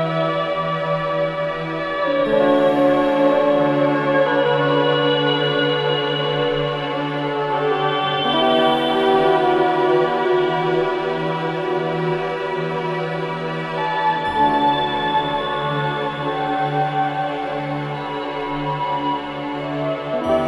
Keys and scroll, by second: 1.6 F1, 5.6 4, 6.0 shift+i, 6.3 3, 17.9 ], 19.1 4.